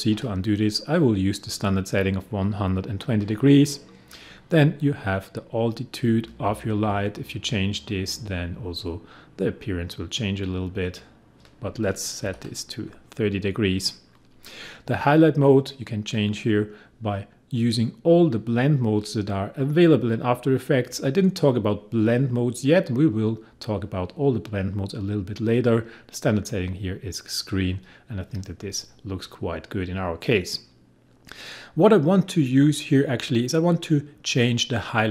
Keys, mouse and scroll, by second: 6.3-12.2 drag, 12.2 ctrl+z, 15.5 click, 27.7 click.